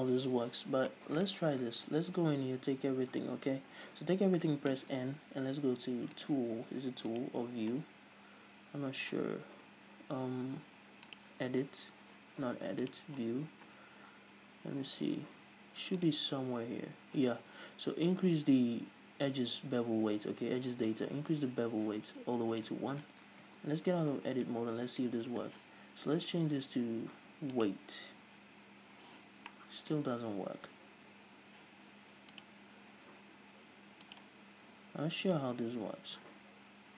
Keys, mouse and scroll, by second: 0.6-1.0 scroll down 2, 1.0-6.3 middle drag, 2.1 Tab, 2.9 a, 6.3-13.6 drag, 13.6-16.1 scroll up 2, 16.1-20.2 drag, 21.0-24.6 drag, 23.7 Tab, 23.9-24.6 scroll up 2, 24.6-27.8 middle drag, 27.8-29.6 drag, 29.6-32.4 middle drag, 32.4-36.9 drag.